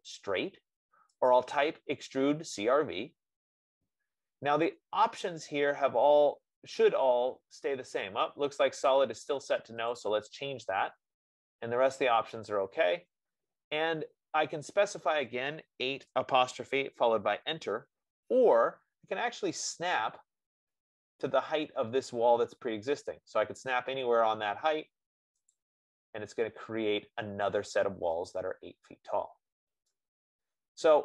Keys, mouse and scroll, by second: 1.9-6.5 drag, 10.4-15.3 drag, 16.4-17.4 typing, 26.0-29.5 drag, 29.5 F15, 29.5 middle click.